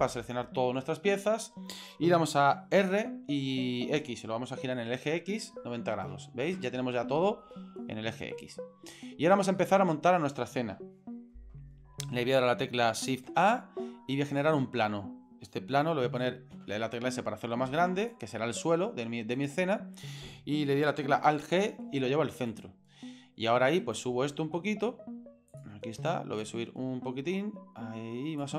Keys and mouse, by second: 2.8 r, 7.4-8.9 middle drag, 9.6-10.1 middle drag, 13.2 shift+a, 16.5 s, 18.5 s, 21.2 alt+g, 22.5 right click, 23.2 middle click, 23.8 right click, 24.5 middle click, 26.4-28.4 drag.